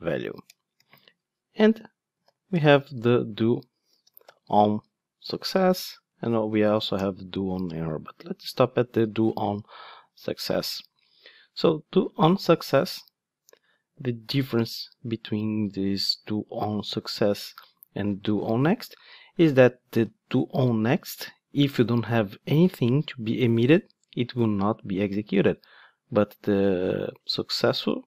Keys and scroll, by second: 7.0 Return, 12.0 Return, 13.9 super+b.